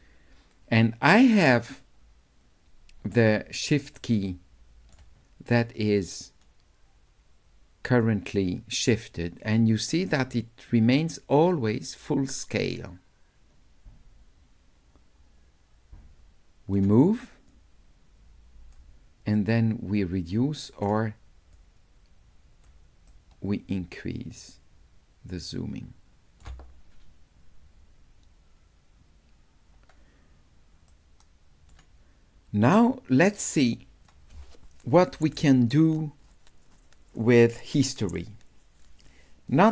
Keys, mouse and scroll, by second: 5.8-8.0 shift+drag, 8.9-16.8 shift+right drag, 17.5-18.7 shift+drag, 19.4-20.8 shift+right drag, 21.6-22.7 shift+drag, 23.1-26.4 shift+right drag, 30.9 right click, 32.8-34.0 drag.